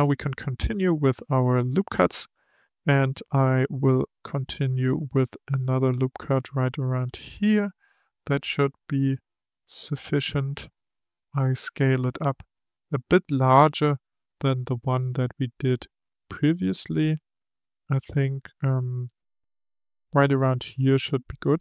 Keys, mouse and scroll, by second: 0.6-3.7 drag, 5.5-8.6 drag, 10.6 s.